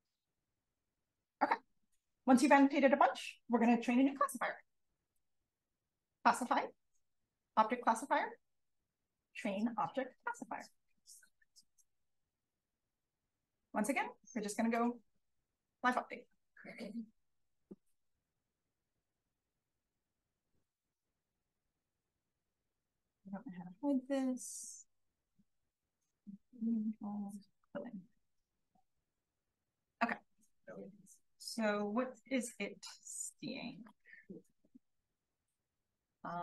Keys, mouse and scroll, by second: 14.2 click, 27.4 click, 33.6 click, 34.1 click, 34.6 d, 35.2 d.